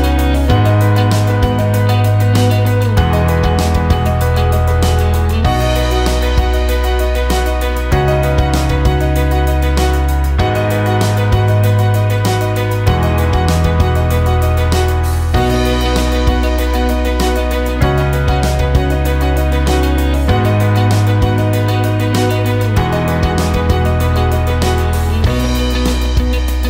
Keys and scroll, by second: 0.5 shift+z, 23.8 ctrl+space.